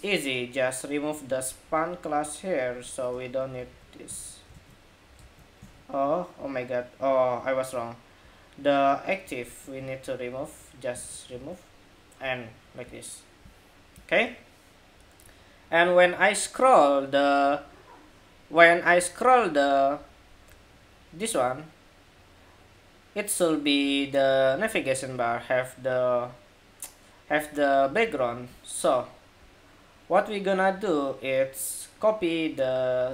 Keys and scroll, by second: 3.4 super+s, 3.9 super+Tab, 4.4 super+r, 4.9 super+r, 5.4 super+Tab, 9.6 super+s, 10.7 super+Tab, 11.0 super+r.